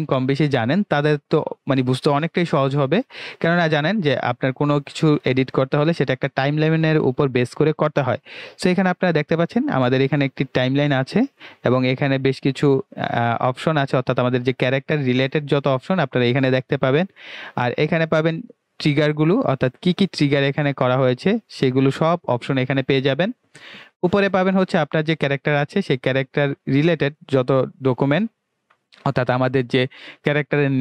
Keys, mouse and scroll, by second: 20.1-20.8 scroll down 1, 20.1 typing, 25.5 click.